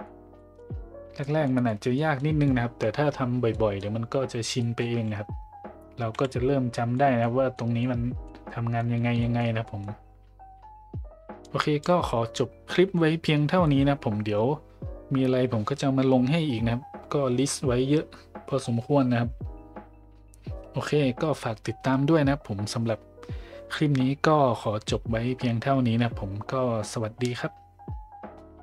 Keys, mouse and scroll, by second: 0.3 middle drag, 1.2 middle drag, 1.6 middle drag, 2.1 middle drag, 3.5 middle drag, 4.6 middle drag, 6.1 KP_5, 6.9 middle drag, 7.5 middle drag, 8.2 middle drag, 8.7 middle drag, 9.2 shift+middle drag, 9.6 middle click, 11.4 click.